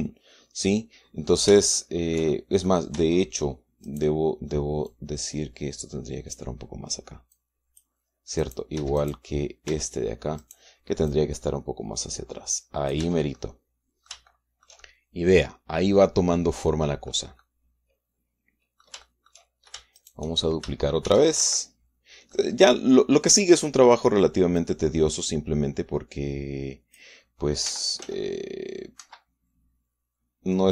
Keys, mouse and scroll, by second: 2.6-3.6 shift+right drag, 3.6 shift+middle click, 3.8 shift+Tab, 4.7 right click, 5.0 middle click, 5.7-7.4 drag, 8.2 click, 9.2 right click, 9.6 Tab, 9.8 right click, 10.5 Tab, 11.9-13.9 drag, 13.8 Tab, 14.2 middle click, 16.0-18.1 shift+middle drag, 18.2-20.3 drag, 20.3 shift+middle click, 20.8 shift+click, 21.1 shift+right click, 21.9 shift+d, 22.2 shift+Escape, 23.2 click, 25.4-28.0 drag, 28.5 r, 28.8 z, 29.8 Escape.